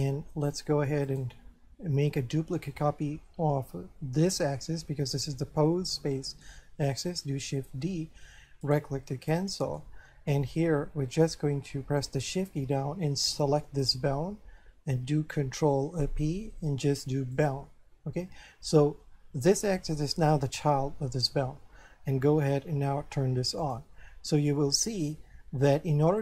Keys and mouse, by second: 1.1 right click, 7.5 shift+d, 8.6 right click, 9.2 shift+middle click, 13.3 shift+right click, 15.9 ctrl+p, 17.3 click, 23.6 click, 24.6 shift+middle click, 25.7 middle click.